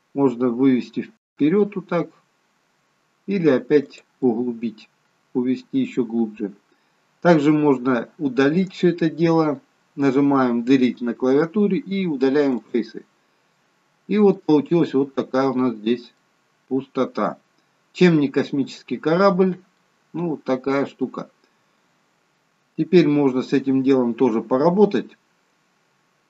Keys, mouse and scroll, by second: 4.2 middle click, 8.7 right click, 10.9 Delete, 13.6 middle click, 14.6-16.2 scroll up 12, 16.2 middle click, 18.9 scroll down 3, 19.8 middle click, 19.8 scroll down 2, 21.7-22.5 scroll down 1, 22.5 scroll up 2, 25.1-26.2 scroll down 1.